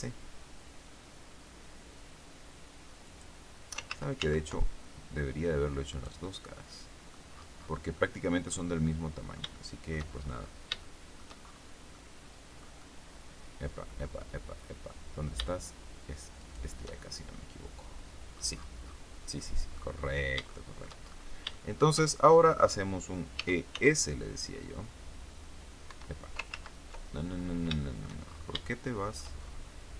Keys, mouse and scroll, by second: 3.0 click, 3.8 ctrl+z, 5.8 right click, 6.4 click, 7.2-7.8 scroll down 2, 7.8 click, 8.7-10.0 drag, 10.4 scroll up 1, 10.7 shift+click, 11.8 click, 14.4 click, 16.3 shift+right click, 16.9-17.2 shift+scroll down 1, 17.2-18.4 drag, 18.4-18.9 scroll down 1, 18.9-19.3 scroll down 1, 19.3 click, 19.8-20.2 scroll up 1, 20.4 shift+middle click, 21.3-22.6 shift+middle drag, 22.6 scroll up 1, 23.2 e, 23.6 s, 25.8 Escape, 26.4 ctrl+z, 27.3-27.7 scroll down 3, 27.7 shift+middle click, 28.1-28.5 shift+scroll up 2, 28.6 shift+middle click, 29.6 scroll up 2.